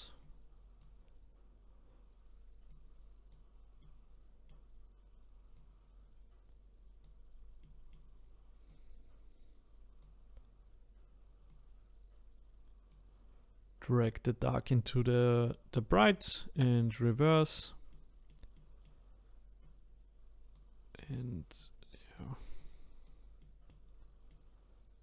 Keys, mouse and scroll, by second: 1.6-2.3 scroll down 2, 2.3-2.7 scroll down 1, 2.7-3.8 drag, 3.8-5.5 middle drag, 5.5-7.6 drag, 7.6-8.7 middle drag, 8.7-17.9 drag, 17.9-19.6 middle drag, 19.6-23.4 drag, 23.4 middle click, 24.0 scroll down 2, 24.3-25.0 middle drag.